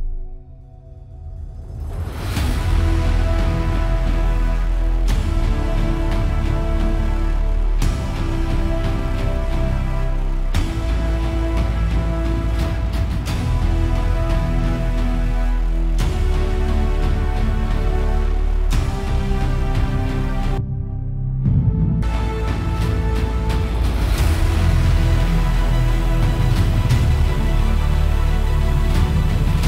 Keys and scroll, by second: 17.7 super+=.